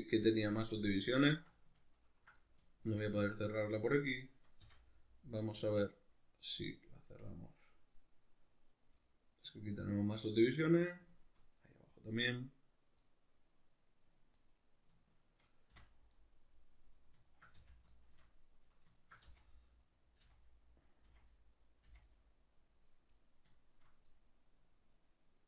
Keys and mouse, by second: 3.7 right click, 4.6 f, 4.9-8.7 middle drag, 8.7 right click, 9.0-14.0 middle drag, 14.0 right click, 14.4 middle click, 15.1 shift+right click, 15.7 f, 16.2 middle click, 16.9 right click, 17.3 shift+right click, 17.6 f, 17.9 shift+middle click, 18.6 right click, 19.0 shift+right click, 19.2 f, 19.8 right click, 20.2 f, 20.8 right click, 21.0 f, 21.6 right click, 21.8 f, 22.1 middle click, 22.9 right click, 23.2-24.9 middle drag, 24.9 right click.